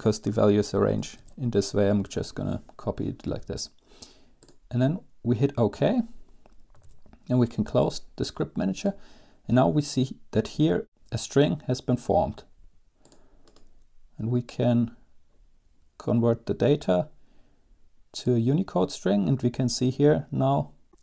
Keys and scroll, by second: 0.0 ctrl+x, 0.2 BackSpace, 0.7 Home, 1.3 ctrl+v, 1.7 space, 6.9 super+q.